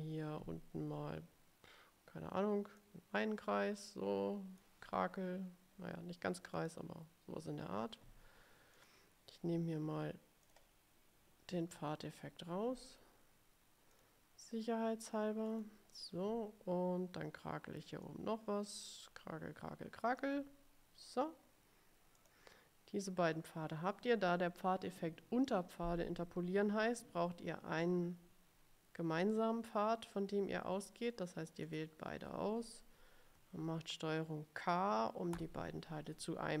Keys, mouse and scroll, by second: 2.9-4.9 drag, 6.7 click, 8.9 click, 10.6 click, 14.0 click, 15.6 click, 18.2-20.5 drag, 22.4 click, 31.7 shift+click, 35.4 ctrl+k.